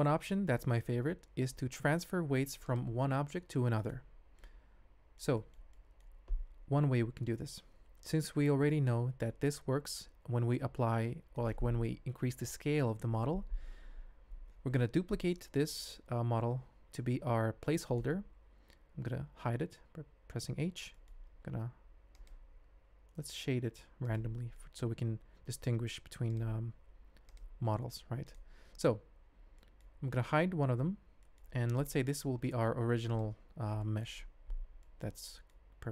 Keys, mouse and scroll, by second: 0.0 alt+a, 0.0 n, 0.3 shift+drag, 2.6 click, 3.1 g, 4.4-5.3 middle drag, 5.5 shift+middle click, 5.7 ctrl+middle click, 7.4-7.9 middle drag, 7.9-9.0 drag, 9.0-9.3 middle drag, 9.8 g, 15.7 shift+d, 19.6 h, 20.9 ctrl+middle click, 22.1-24.3 drag, 24.5 ctrl+middle click, 25.2 alt+h, 26.3 click, 26.8 h, 27.3 click, 27.6 g, 29.6 click, 30.7 h, 31.2 click, 33.1 click, 33.8 middle click, 34.8 ctrl+click, 35.3 shift+click, 35.5 middle click.